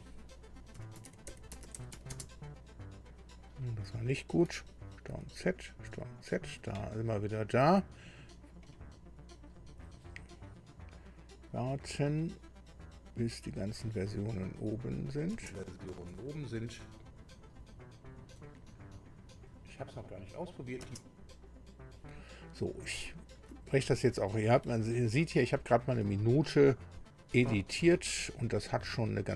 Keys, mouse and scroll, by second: 0.5-2.7 typing, 5.1 ctrl+z, 5.9 ctrl+z, 8.6 click, 11.5 click, 15.1 click, 15.4 space, 21.4 space, 21.5 click, 26.4-27.0 shift+scroll up 2, 27.6-28.0 ctrl+shift+scroll up 3, 28.6 ctrl+scroll down 2.